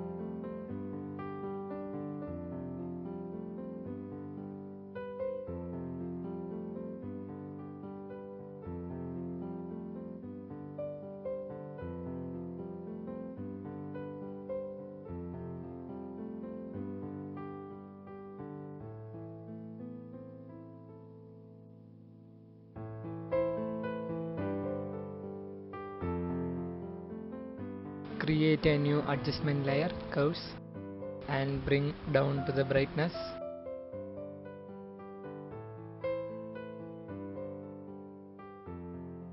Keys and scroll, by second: 0.0-1.0 typing, 2.1 space, 5.2-6.9 typing, 7.7 ctrl+z, 9.2 space, 11.8 ctrl+0, 19.0 ctrl+0, 24.4-24.8 typing, 38.8 ctrl+Delete.